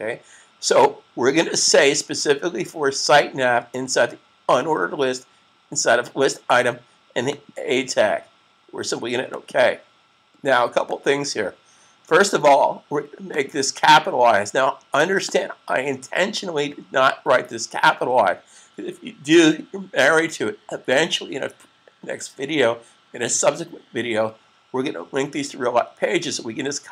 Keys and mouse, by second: 1.5 click, 7.1 click, 13.2 click.